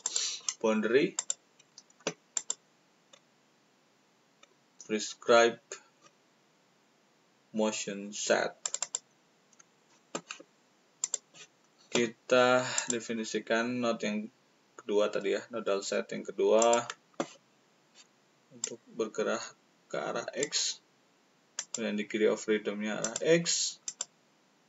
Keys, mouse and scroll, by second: 0.0 click, 1.1 click, 2.3 click, 3.1-4.8 scroll up 1, 5.9-6.8 scroll up 1, 8.6 click, 8.7 click, 11.0 click, 12.7 click, 16.5 click, 18.5-20.3 drag, 21.5 click, 23.0 click, 23.8 click.